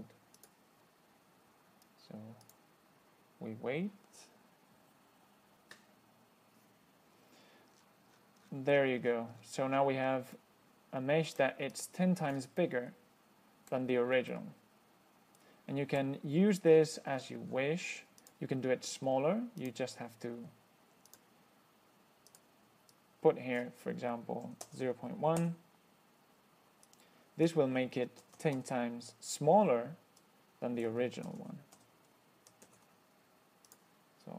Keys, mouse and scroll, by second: 0.6 click, 2.7 click, 8.0-10.2 scroll down 12, 10.6-11.9 middle drag, 12.0-12.8 drag, 12.8-14.2 middle drag, 14.2-14.6 scroll up 1, 14.6-16.3 middle drag, 16.3 scroll up 1, 16.9-17.2 scroll up 1, 17.4-18.0 scroll down 2, 18.5 click, 19.9 click, 21.3 click, 22.6 click, 23.2 click, 24.9 KP_0, 25.1 KP_Decimal, 25.7 KP_1, 27.1 click, 28.5 KP_0, 28.6 KP_Decimal, 28.8 KP_1, 30.5 click, 31.5 KP_0, 31.7 KP_Decimal, 32.0 KP_1, 32.9 ctrl+s, 33.9 click.